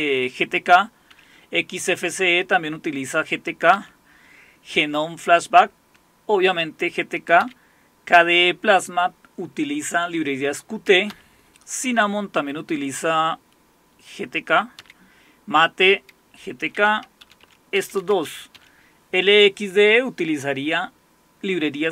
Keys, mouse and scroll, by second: 1.0-3.7 scroll down 2, 3.7 scroll down 1, 7.4-8.1 scroll down 2, 8.1 scroll down 1, 11.1 Down, 14.8 Down, 16.3 Down, 16.6 Down, 16.9 Down, 17.2 Up, 17.4 Up, 17.8 Down, 18.0 Down, 18.2 Up, 18.5 Up.